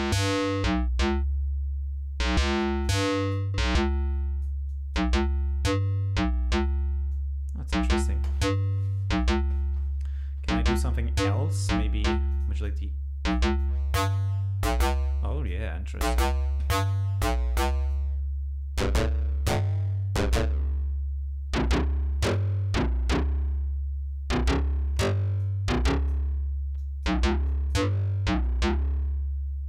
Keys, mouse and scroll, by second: 2.8 click, 3.7 click, 4.7 click, 7.1 click, 12.3 click, 12.7 click, 13.6-15.7 drag, 17.9-22.5 drag, 23.6-23.9 scroll up 2, 25.4 click, 26.8 click, 27.5 click, 29.3 scroll up 2.